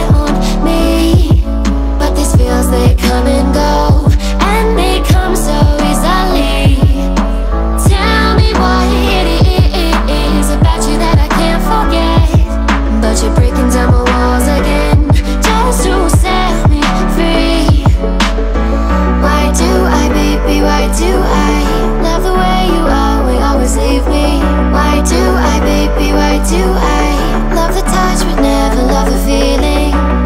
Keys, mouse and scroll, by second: 0.0 click, 1.6-3.2 typing, 7.4-8.6 typing, 12.0-13.2 typing, 15.9-17.4 typing, 17.4 Return, 20.4 click, 22.3-23.6 scroll down 1, 23.6 scroll down 1, 24.4 click, 28.3 click.